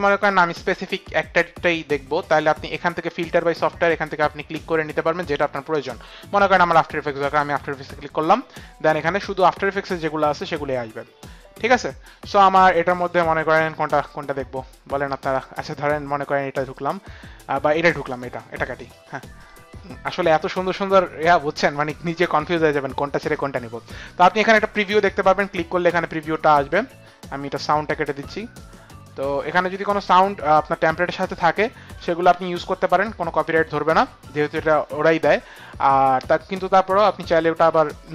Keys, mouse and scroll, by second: 6.7 click, 16.8 middle click, 18.0 middle click, 18.9 middle click, 19.4 click, 24.5 click, 26.3 click, 28.7 click.